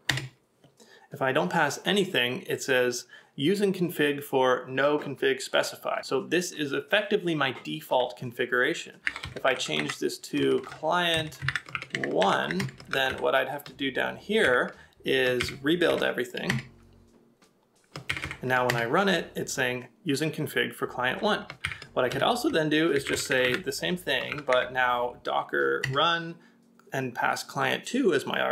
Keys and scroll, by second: 5.7 typing, 10.3-13.7 typing, 12.9 ctrl+a, 14.4 Up, 15.5 Up, 16.5 Return, 18.1 Up, 18.7 Return, 22.1 Up, 22.1 space, 22.5 BackSpace, 23.9-24.3 typing, 25.5-26.2 typing.